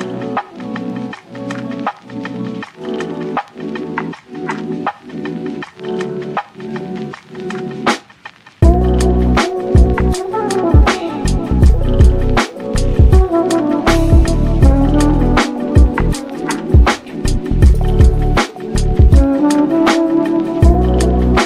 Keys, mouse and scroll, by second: 0.1 Tab, 0.3 z, 0.7 click, 0.9 scroll up 2, 1.2 shift+middle click, 1.6 g, 2.9 Tab, 3.0 scroll down 3, 3.3 z, 3.5-4.0 middle drag, 4.0-4.3 scroll down 1, 4.3 shift+middle drag, 4.6 scroll down 1, 4.7 middle click, 5.0 click, 5.5 scroll up 1, 5.7-6.4 shift+middle drag, 7.1 shift+a, 7.5 s, 8.2 middle click, 8.9 g, 10.1 g, 11.4 s, 12.9 g, 13.7 Tab, 14.3 e, 14.9 Tab, 15.1-15.9 middle drag, 15.9 n, 16.7-18.2 drag, 18.2 n, 18.6-19.1 scroll up 3, 19.1 g, 20.4-20.9 scroll down 2, 20.4-20.7 middle drag, 20.9 shift+middle click, 21.2 ctrl+a.